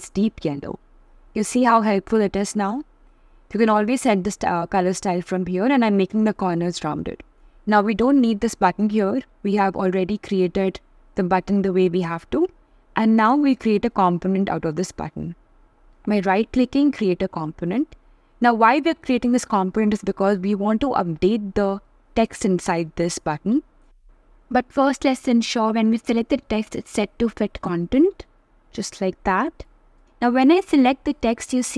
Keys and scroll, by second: 17.8 shift+b.